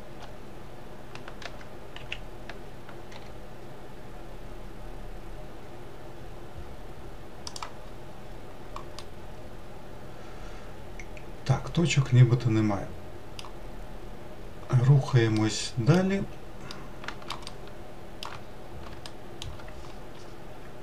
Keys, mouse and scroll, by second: 1.3 g, 7.7-8.4 scroll down 3, 8.8-11.9 middle drag, 13.5-14.2 scroll down 1, 14.2-15.2 scroll down 4, 15.3-18.3 middle drag, 18.3-18.9 scroll down 2, 18.9-20.8 shift+middle drag.